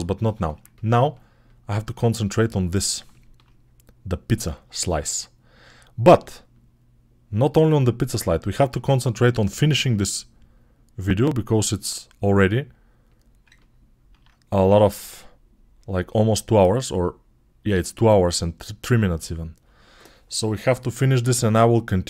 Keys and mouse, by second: 0.8 click, 1.0 middle click, 1.9 click, 2.9 shift+middle click, 3.0 shift+click, 3.2 middle click, 3.7-5.4 drag, 5.4-6.4 middle drag, 6.4-8.4 drag, 8.4-10.4 middle drag, 9.3 2, 10.4-13.0 drag, 13.0-15.6 ctrl+alt+middle drag, 14.5 1, 15.6-22.0 drag.